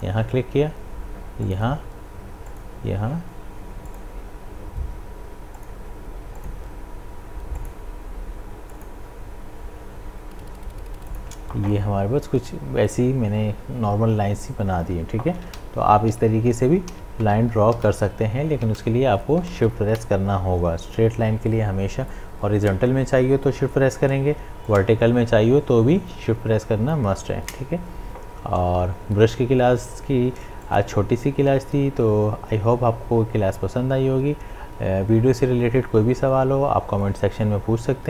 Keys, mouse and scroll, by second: 11.1 shift+click, 15.4 shift+click, 15.5 ctrl+z, 16.2 ctrl+z, 19.5 ctrl+z, 22.1-24.7 drag, 24.7-30.1 drag, 30.6-33.5 drag.